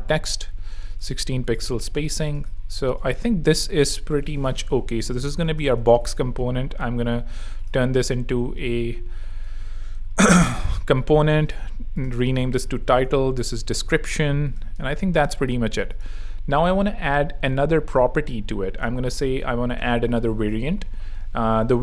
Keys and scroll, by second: 1.1 alt+shift+z, 1.6 z, 2.5 space, 3.4 z, 4.6 super+r, 4.9-5.8 typing, 9.3 super+r, 9.9 shift+super+r, 10.2-15.2 typing, 12.1 super+r.